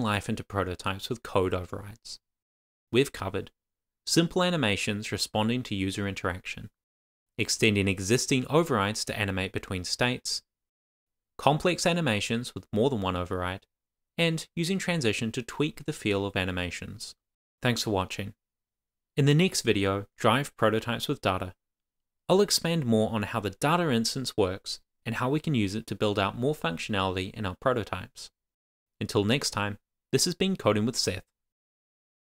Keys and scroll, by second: 10.6 super+s.